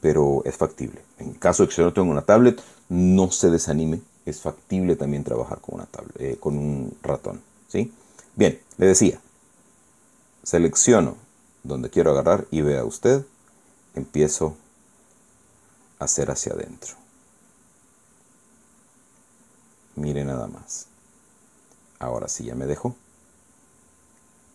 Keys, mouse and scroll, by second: 11.6-13.2 drag, 13.5 click, 14.8 click, 15.7 click, 16.3 click, 16.8 click, 17.3 click, 17.8 click, 18.8 click, 19.5 click, 19.9-21.1 drag, 21.2 click, 21.7 click, 22.4 click, 22.9-24.5 middle drag.